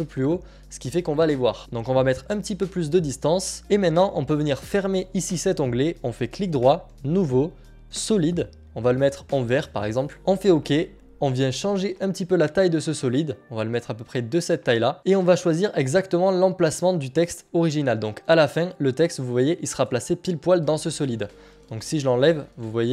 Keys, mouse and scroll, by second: 2.5-3.6 scroll, 3.6 click, 3.7 click, 4.7 click, 7.6 click, 10.5 click, 11.1 click, 11.1 click, 12.1 click, 15.0 click, 17.2 click, 19.1 click.